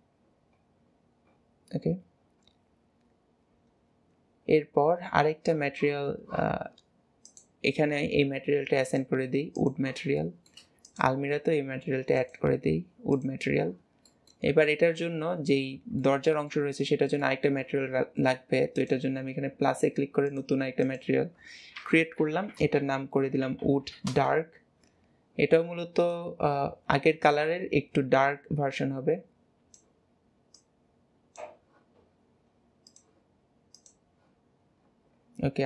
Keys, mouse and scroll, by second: 0.2 scroll down 2, 0.8 scroll down 7, 2.2 scroll up 2, 4.0 scroll up 8, 5.0-7.3 scroll up 1, 7.3 click, 8.9-10.2 drag, 10.2 shift+middle click, 10.9 click, 12.5-14.1 drag, 14.1-14.5 middle drag, 14.7-16.8 middle drag, 17.2-18.8 middle drag, 18.8-22.4 drag, 26.0 click, 32.9 click.